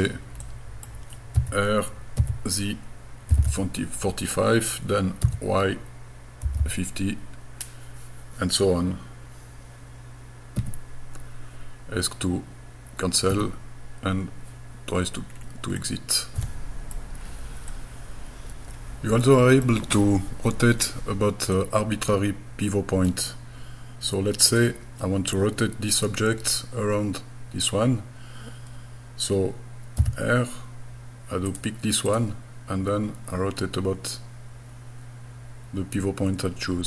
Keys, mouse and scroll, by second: 0.4 middle click, 1.4 r, 3.3 KP_4, 3.4 KP_5, 5.3 y, 6.4 KP_1, 6.6 KP_5, 10.6 Escape, 13.3 Escape, 15.3-16.3 scroll down 3, 15.8-16.9 middle drag, 17.3-17.7 scroll down 2, 17.7-21.3 middle drag, 21.6-23.1 middle drag, 24.5 click, 30.0 r, 31.5 click, 32.1 click.